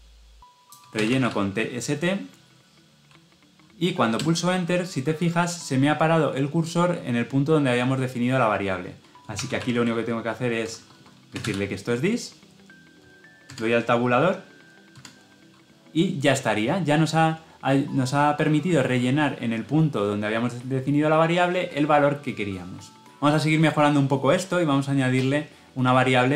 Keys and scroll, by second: 4.1 Return, 13.3 Tab.